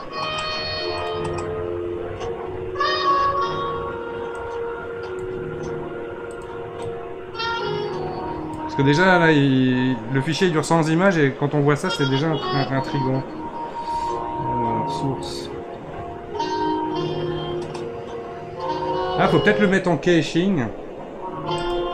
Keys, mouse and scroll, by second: 6.3 click, 6.8-13.3 drag, 14.5-15.2 scroll down 6, 15.2-15.7 drag, 15.7-16.1 scroll down 5, 21.6 click.